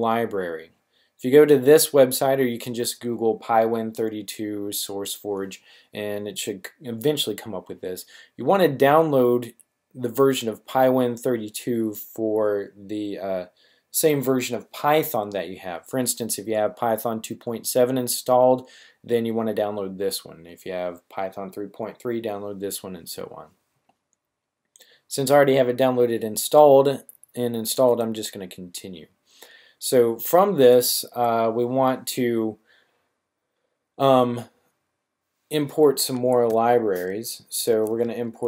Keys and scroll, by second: 37.7-38.4 typing.